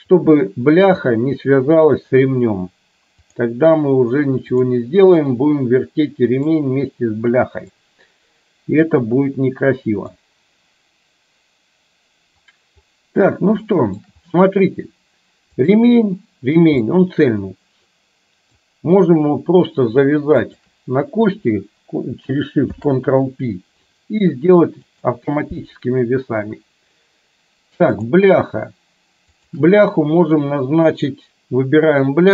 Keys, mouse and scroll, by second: 3.4-4.8 drag, 5.3-6.6 middle drag, 7.9-10.2 middle drag, 13.8 shift+middle click, 16.9-18.7 middle drag, 20.6 shift+click, 22.7 ctrl+p, 28.1 click, 29.3 shift+click.